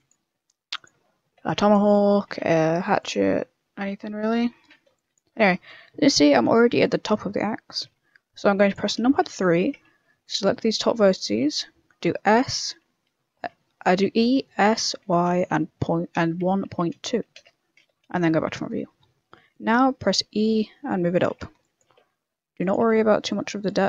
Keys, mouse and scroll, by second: 0.0-3.2 typing, 4.6 a, 4.9 b, 5.2 g, 5.8 a, 7.5 shift+middle click, 8.2 b, 9.0 KP_Enter, 9.3 KP_3, 10.1 b, 10.9 shift+middle click, 12.0 e, 13.3 s, 18.0 KP_1, 18.7-19.0 scroll down 2, 19.4-21.0 scroll down 1, 19.4 e, 21.3-23.5 typing, 23.0 shift+middle click, 23.2 scroll up 2.